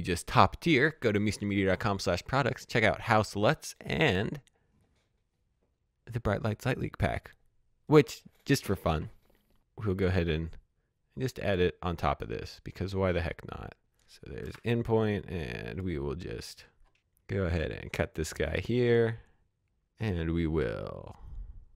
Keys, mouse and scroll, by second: 9.9 click, 13.8 space, 14.3 click, 15.4-16.1 scroll up 1, 16.1 click, 18.8 Delete, 18.9 click, 21.4 click.